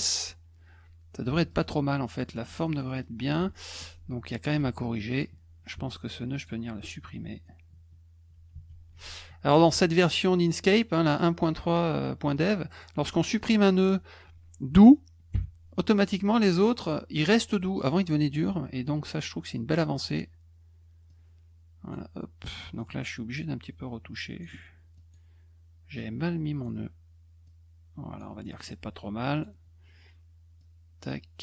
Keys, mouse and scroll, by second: 1.3 F1, 1.5 click, 2.6 middle click, 2.6-3.0 scroll up 3, 2.8 middle click, 2.9 middle click, 3.7 click, 4.7 a, 6.4 ctrl+alt+click, 12.3 click, 12.7 click, 13.3 click, 16.8 click, 18.5-19.7 drag, 21.1 click, 22.8-24.4 drag, 24.9 click, 26.0 click, 27.4 click, 28.4 middle click, 29.3 click, 30.6-31.4 drag.